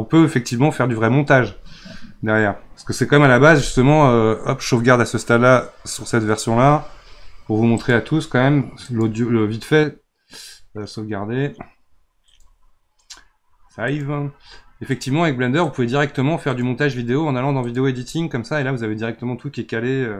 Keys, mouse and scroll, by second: 0.0-3.1 scroll down 1, 7.7 click, 14.9 click.